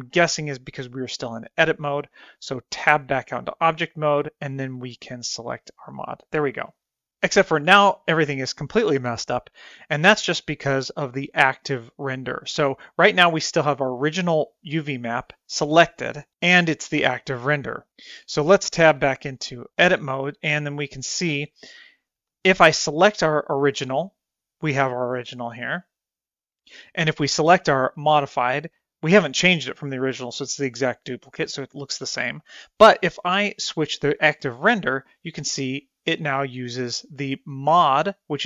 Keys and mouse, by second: 3.4 Tab, 5.1-6.1 drag, 19.6 Tab, 28.6 click, 35.3 click.